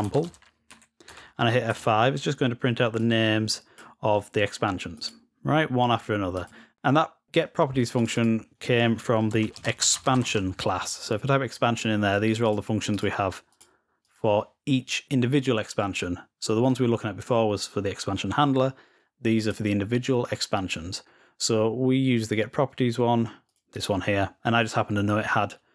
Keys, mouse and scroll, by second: 2.8 click, 3.6-6.8 drag, 7.9 click, 8.1 click, 12.2 click.